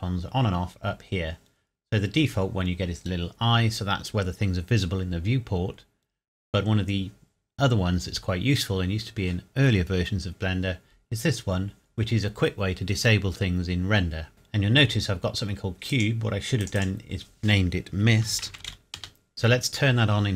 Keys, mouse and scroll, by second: 15.9 click, 18.3-18.7 typing, 19.0 Return, 19.3 click.